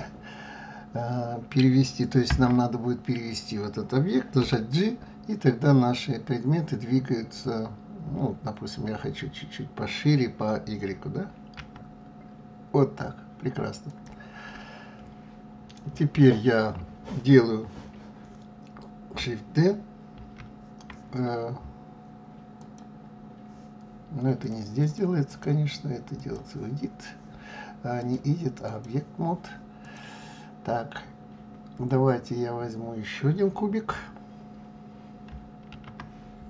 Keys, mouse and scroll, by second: 2.3 Tab, 4.4 g, 20.1 shift+d, 22.6 click, 24.4 click, 24.8 click, 25.3-29.9 drag, 35.7 shift+a.